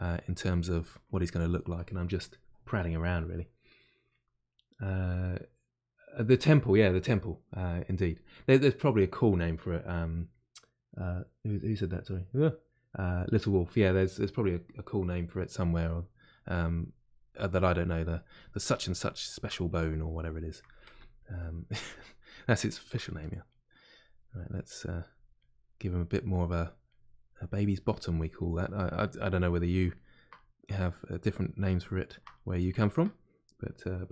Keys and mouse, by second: 0.8-15.3 ctrl+drag, 15.3-16.8 middle drag, 16.8-19.5 drag, 19.5-20.9 middle drag, 20.9 shift+click, 21.8 middle click, 22.3 shift+click, 23.0 middle click, 23.9-25.3 drag, 25.3 middle click, 25.9 click, 26.8 middle click, 27.4 click, 27.8 middle click, 28.4 click, 29.0 middle click, 29.9 ctrl+click, 30.3-31.6 middle drag, 31.6 shift+click, 32.3-34.1 middle drag.